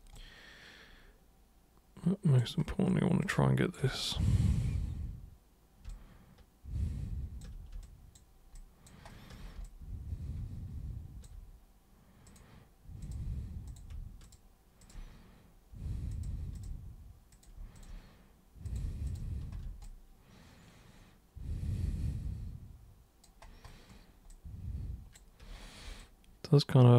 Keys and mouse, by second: 0.1-2.3 alt+super+drag, 3.2 alt+super+click, 5.9-7.4 alt+super+drag, 7.8 alt+super+click, 8.5 alt+super+click, 9.6-11.2 alt+super+drag, 12.3 super+click, 13.0 super+click, 13.6 super+click, 14.2 shift+super+click, 14.8 shift+super+click, 16.1 super+click, 16.6 shift+super+click, 17.3 super+click, 17.7 shift+super+click, 18.6 super+click, 19.1 shift+super+click, 19.8-23.2 alt+drag, 24.3-25.2 alt+drag, 25.9-26.9 alt+super+drag.